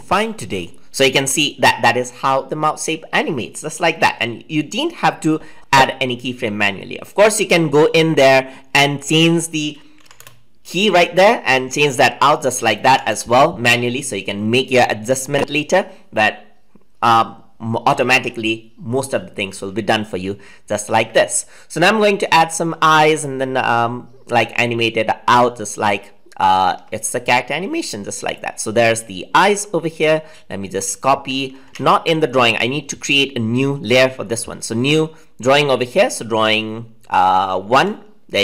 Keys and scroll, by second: 31.6 ctrl+z.